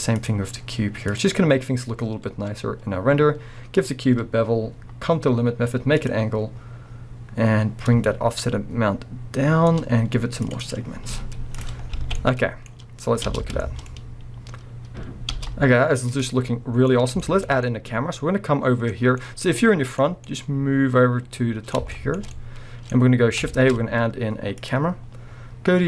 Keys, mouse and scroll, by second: 1.1-6.1 drag, 8.0-12.2 shift+drag, 11.1 z, 11.8 scroll down 1, 12.0 alt+a, 12.2-14.0 middle drag, 12.7-13.3 scroll down 1, 13.3 space, 15.3 space, 15.7-16.1 scroll down 1, 16.1 middle click, 17.4-25.8 middle drag, 18.9 scroll up 2, 23.5 shift+a.